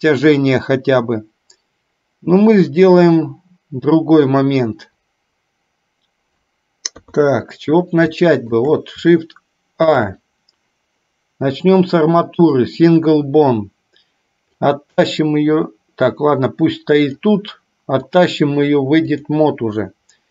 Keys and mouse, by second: 7.1 KP_3, 8.3 shift+middle drag, 9.9 shift+a, 14.8-17.3 drag, 18.4-19.4 drag.